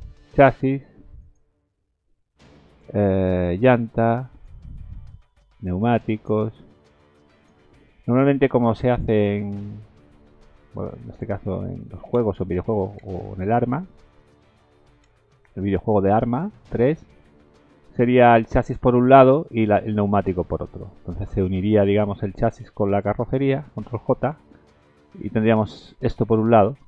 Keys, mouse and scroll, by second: 1.2 click, 2.7 click, 3.1 scroll down 2, 4.3 click, 5.1 scroll down 2, 6.1 click, 7.3 click, 8.7 middle click, 8.7 z, 8.9 z, 10.5 middle click, 11.1 click, 11.7 middle click, 12.1 shift+z, 12.6 middle click, 13.3 shift+middle click, 13.7 middle click, 14.4-14.8 scroll up 2, 14.8 middle click, 15.2 middle click, 15.7 middle click, 16.2 shift+middle click, 16.7 middle click, 17.1 shift+middle click, 17.9 middle click, 19.2 middle click, 20.3 middle click, 20.8 shift+middle click, 22.3 click, 22.9 shift+click, 24.2 ctrl+j, 25.1 Tab, 25.6 middle click, 26.2 Tab.